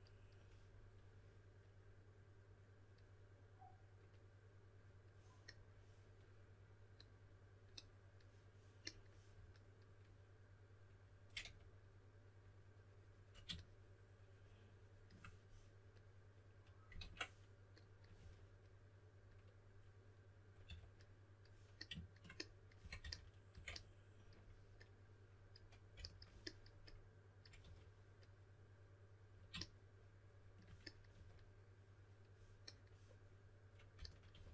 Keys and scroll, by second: 11.4 3, 16.9 super+z, 18.1 typing, 20.6 typing, 22.5-23.5 typing, 25.9 s, 27.6 4, 31.1 4, 33.7-34.5 typing.